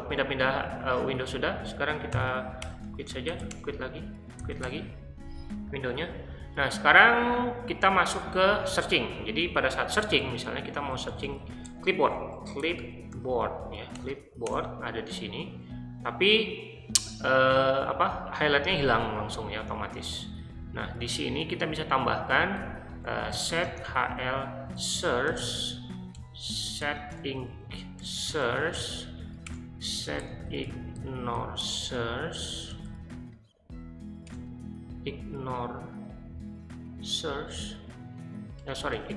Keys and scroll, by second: 1.9-4.6 typing, 10.0-13.9 typing, 14.4 Return, 20.3-33.3 typing, 26.1 Return, 29.4 Return, 34.2 Return, 38.5-39.1 typing.